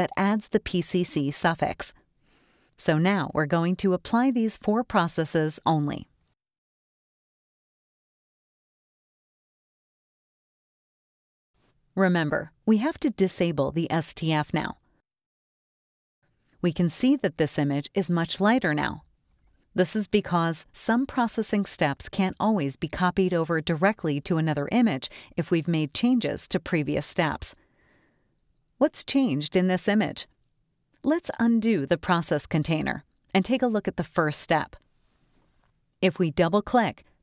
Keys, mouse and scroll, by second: 0.1 click, 5.8 click, 6.4 click, 7.2 click, 8.1 click, 9.9 click, 17.2 click, 18.2-19.4 scroll up 5, 22.0 click, 23.9 click, 33.4 click.